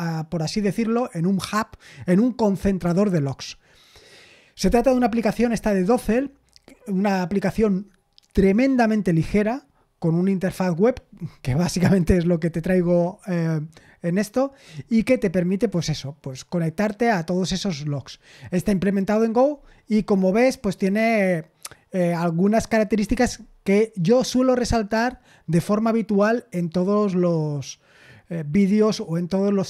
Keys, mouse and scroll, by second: 13.9 scroll down 1, 17.9-18.3 scroll down 1, 19.7-20.2 scroll down 1.